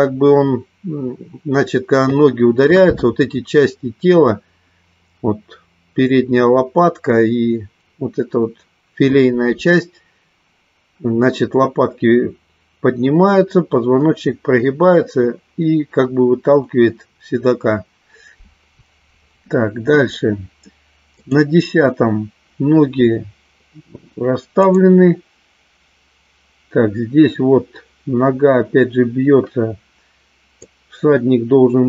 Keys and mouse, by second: 21.7 click, 25.3 click, 31.3-31.8 drag.